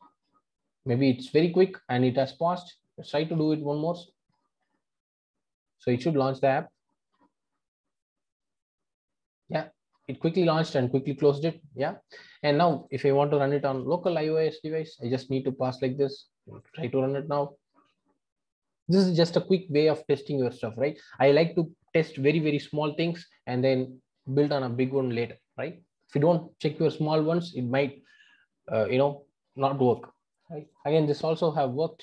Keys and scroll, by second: 3.1 ctrl+r, 16.6 ctrl+r.